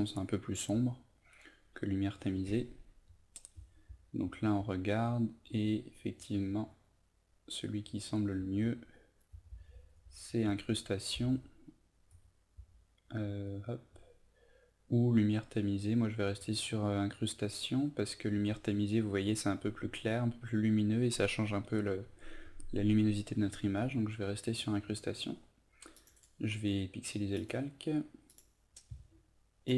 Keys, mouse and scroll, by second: 0.7 Down, 2.7 Down, 3.0 Down, 3.5 Down, 3.8 Down, 7.6 Down, 7.8 Down, 8.0 Down, 8.3 Down, 8.6 Down, 15.1 Up, 16.2 Down, 17.7 Up, 18.3 Down, 23.4 Up, 25.9 click, 26.1 right click, 27.3-29.7 drag.